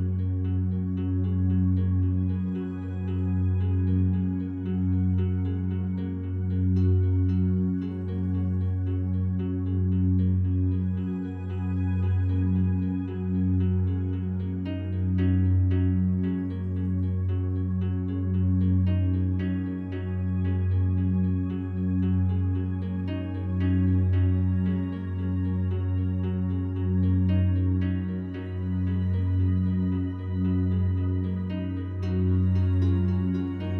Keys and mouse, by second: 1.5-2.6 drag, 3.3 click, 4.1-5.2 drag, 5.8 click, 7.3 click, 8.7 ctrl+z, 9.9 f, 10.4 click, 11.2 click, 12.1 click, 12.7 click, 13.1 click, 13.9-14.9 drag, 15.3 click, 16.4 click, 16.9 click, 18.1 ctrl+alt+click, 18.5 ctrl+alt+click, 20.8 click, 21.5 click, 22.7 click, 23.5 click, 24.4 click, 25.0-26.1 ctrl+alt+drag, 29.0 click, 30.4 3, 30.9 alt+shift+click, 31.3 alt+shift+click, 32.1 ctrl+alt+click.